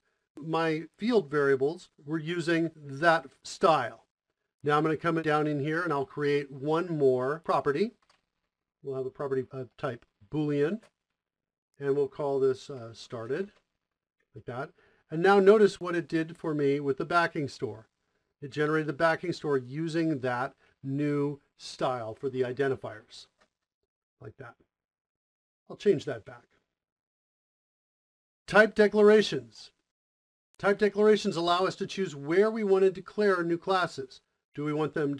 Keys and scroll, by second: 8.1 Return, 8.8 p, 9.3 b, 10.6 typing, 11.9-13.7 typing, 13.7 Return, 16.6 Tab, 17.2 Tab, 20.5 Return, 25.7 BackSpace.